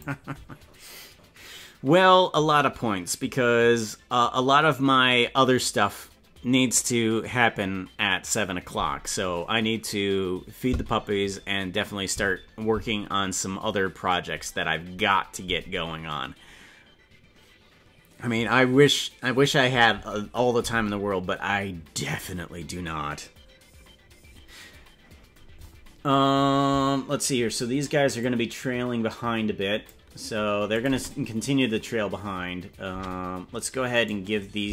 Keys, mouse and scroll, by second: 28.2-29.9 drag, 30.7 click, 31.0 space, 33.0 space, 34.0 right click.